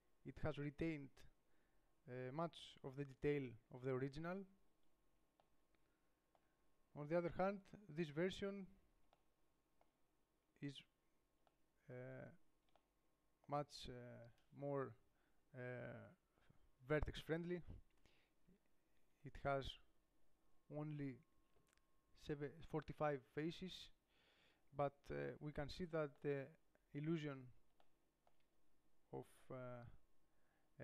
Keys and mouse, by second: 7.9 middle click, 18.8 Tab, 19.3 Tab, 19.8 Tab, 23.9 Tab.